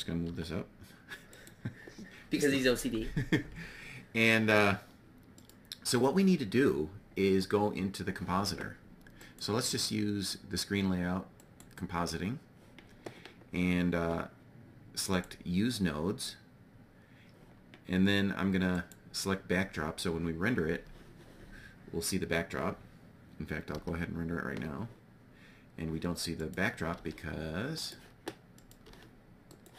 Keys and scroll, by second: 0.2 y, 23.4 F12, 26.9 g.